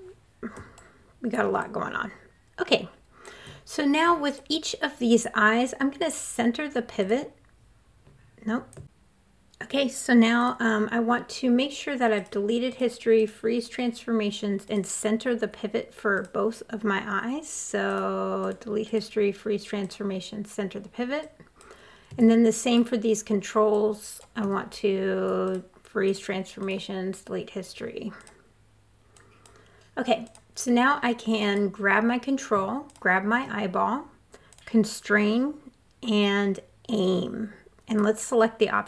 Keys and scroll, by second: 3.2 super+z, 7.7 super+z.